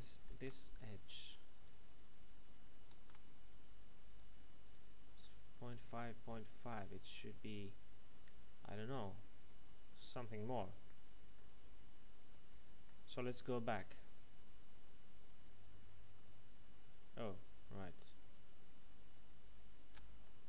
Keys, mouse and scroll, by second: 0.4 ctrl+Tab, 1.5 right click, 3.1 ctrl+Tab, 3.5 click, 4.0 right click, 5.2 middle click, 7.4 right click, 8.8 middle click, 13.2 ctrl+z, 17.7 ctrl+shift+z, 20.2 middle click.